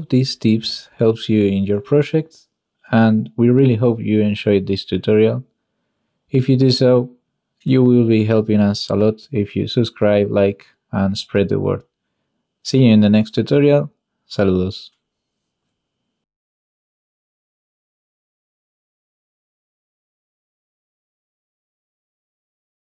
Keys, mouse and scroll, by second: 0.9 click, 4.9 shift+middle click, 5.2 middle drag, 5.6 shift+middle click, 5.8 middle click, 6.2 shift+middle click, 8.7-9.1 ctrl+middle drag.